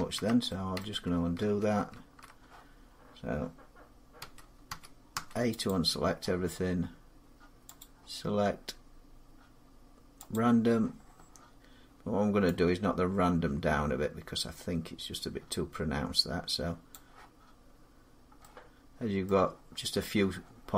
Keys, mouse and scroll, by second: 0.6 middle click, 1.2 ctrl+z, 1.8 ctrl+z, 4.0-4.9 typing, 4.9 scroll, 5.4 click, 7.6 click, 10.1 click, 13.0-15.1 drag, 16.7 click, 19.0 middle click.